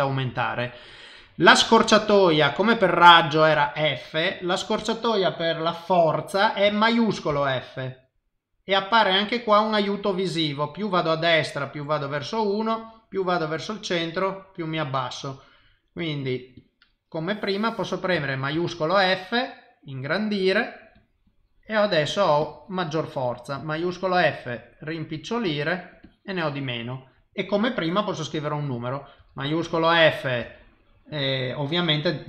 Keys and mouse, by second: 7.3 shift+f, 16.5 click, 18.5 shift+f, 21.0 click, 22.1 click, 22.4 click, 23.7 shift+f, 25.9 click, 26.0 click, 29.2 shift+f.